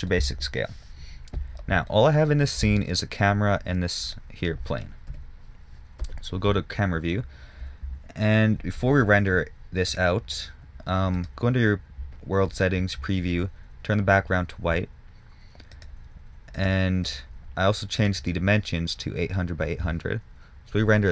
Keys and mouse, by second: 5.4 KP_7, 6.3 KP_0.